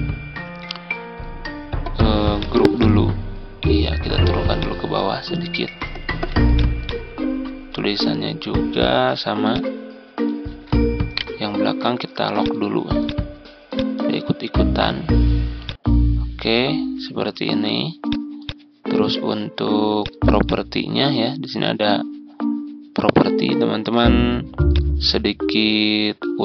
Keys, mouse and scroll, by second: 6.0 ctrl+z, 6.4-10.8 drag, 10.4 z, 11.0 right click, 12.3-21.8 drag, 23.2 ctrl+scroll up 1, 24.6 shift+click, 26.3 ctrl+scroll down 1.